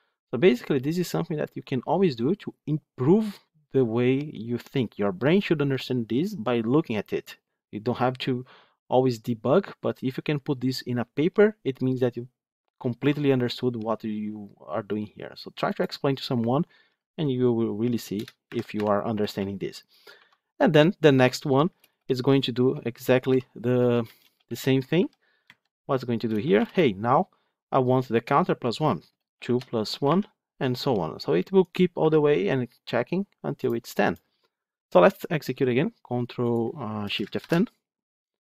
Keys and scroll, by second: 37.3 ctrl+shift+F10.